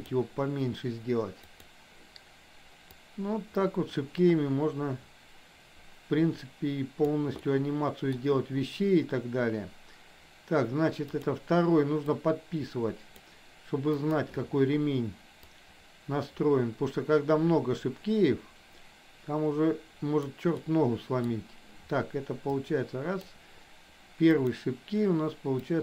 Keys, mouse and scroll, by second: 1.6 click, 3.1-7.2 drag, 7.4 middle click, 12.3-13.3 drag, 13.9 click, 15.6-20.3 drag, 20.6 middle click, 22.6 click, 25.7-25.8 drag.